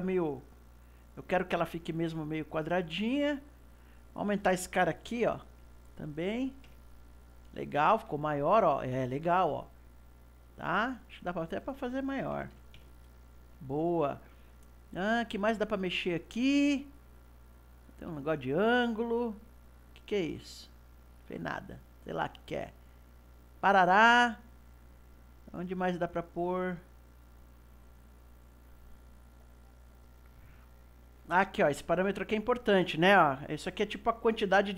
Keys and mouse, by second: 3.9-7.0 drag, 7.9-11.5 middle drag, 11.5-13.7 drag, 13.7-16.7 middle drag, 20.2 click, 21.0 click, 25.4-28.4 drag.